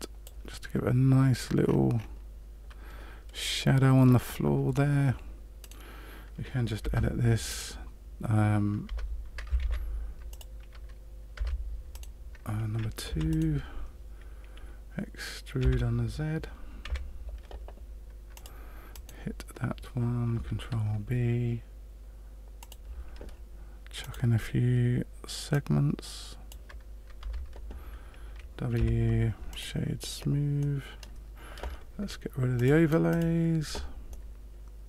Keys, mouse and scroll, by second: 1.6-2.1 scroll up 6, 5.6 right click, 6.8 Tab, 7.4 right click, 8.8 Tab, 9.5 ctrl+a, 11.4 Tab, 11.9 right click, 13.0 2, 13.3 right click, 15.6 e, 19.0 right click, 20.6 ctrl+b, 24.1 click, 25.5 click, 27.2 Tab, 28.7 w, 30.5 middle click, 32.5 click, 33.1 click, 34.0 middle click.